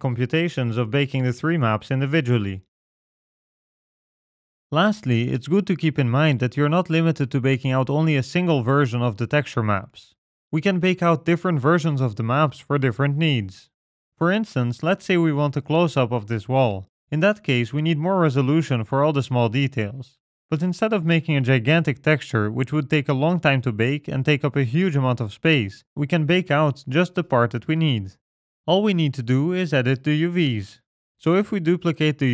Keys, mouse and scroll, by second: 0.0 click, 1.2 middle click, 1.3 ctrl+right click, 1.3 click, 2.8 click, 14.2-14.6 scroll up 3, 15.0-16.3 scroll up 3, 16.3 shift+middle click, 17.2-18.3 scroll up 2, 18.8 scroll up 1, 27.6-28.3 scroll down 10, 28.3 middle click, 29.3 Tab, 30.8 click.